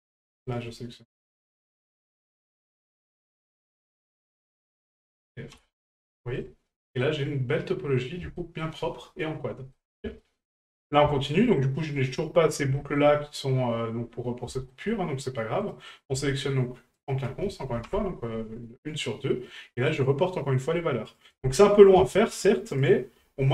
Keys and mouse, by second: 0.4 shift+right click, 1.7 shift+right click, 3.2 right click, 3.8 shift+right click, 4.3 shift+right click, 4.8 shift+right click, 6.8 middle drag, 8.4 shift+middle drag, 9.7 middle drag, 10.2 shift+middle drag, 11.1 shift+middle click, 11.8 middle click, 12.8 shift+middle click, 13.2 middle click, 14.5 shift+middle click, 15.6 right click, 17.0 shift+right click, 19.9 right click, 21.1-22.9 drag.